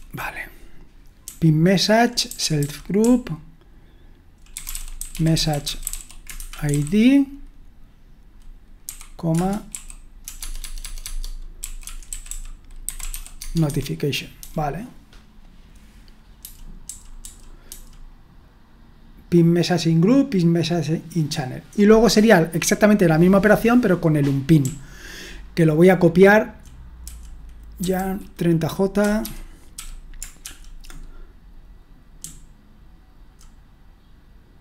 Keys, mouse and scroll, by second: 0.0-7.3 typing, 9.3 Return, 9.7 d, 10.4 Tab, 10.6 Tab, 10.8 Tab, 11.0 Tab, 11.3-14.4 typing, 13.7 Escape, 16.8-17.6 typing, 24.6-30.4 typing, 32.0-33.2 typing.